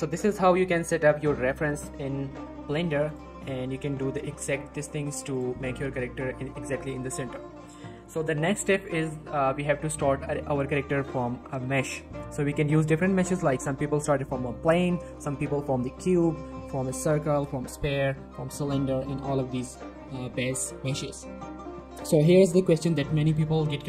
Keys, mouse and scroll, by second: 0.4 x, 0.5 click, 0.8-1.2 scroll up 1, 1.2 scroll down 1, 1.3 middle click, 1.6 click, 1.9 g, 2.2 y, 2.6 x, 3.1 click, 4.4 y, 4.8 click, 5.0 middle click, 5.3 click, 5.7 ctrl+s, 6.8 click, 7.2 middle click, 9.1-9.7 scroll up 1, 9.9 shift+middle click, 11.0 middle click, 11.5 shift+a, 12.1 shift+a, 18.3 shift+a, 23.7 middle click.